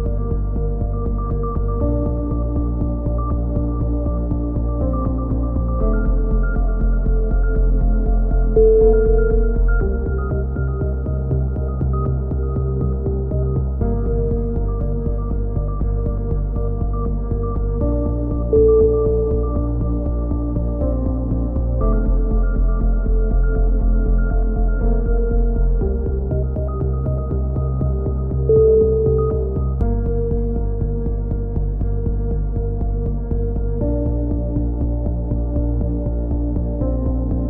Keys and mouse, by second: 0.7 e, 2.2 KP_7, 2.8 a, 3.3 right click, 3.9 right click, 4.5 right click, 5.2 e, 5.6 click, 6.8 click, 7.5-8.6 right drag, 8.4 f, 8.5 a, 9.2 z, 9.4 z, 9.6 click, 10.5 click, 10.5 KP_3, 11.8 KP_7, 12.3-13.3 right drag, 13.3 e, 14.9 e, 16.6 right click, 16.8 KP_3, 17.3 click, 18.1 KP_7, 18.3 right click, 18.6 e, 19.9 a, 20.3 ctrl+r, 20.7 click, 21.1 g, 22.3 click, 23.9 g, 24.8 right click, 25.0 f, 25.1 a, 25.3 z, 25.7 click, 26.6 click, 26.6 right click, 27.5 KP_3, 28.0-29.8 drag, 29.9 a, 30.5 click, 31.6 click, 32.2 KP_7, 33.5 right click, 33.7 click, 34.8 e, 35.9 KP_3, 36.4 click.